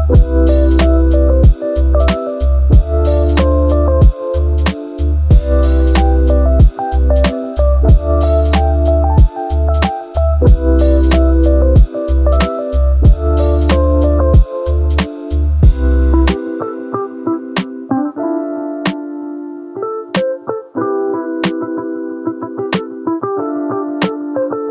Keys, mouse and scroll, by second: 0.6 ctrl+v, 1.8-3.0 drag, 3.9-5.0 drag, 5.7-6.8 drag, 8.8 middle click, 9.4 middle click, 9.9 middle click, 10.2-10.9 middle drag, 12.2 middle click, 12.2 a, 13.0 KP_5, 15.2 click, 16.5 KP_7, 18.9 click, 20.1-21.7 middle drag, 22.1 middle click, 22.3-24.7 middle drag.